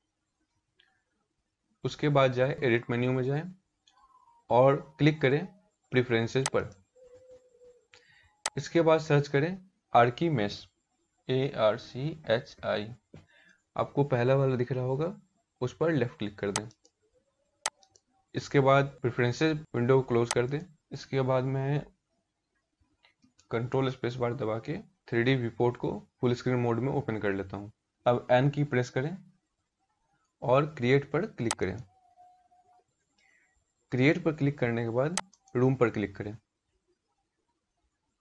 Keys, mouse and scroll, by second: 22.8 ctrl+space.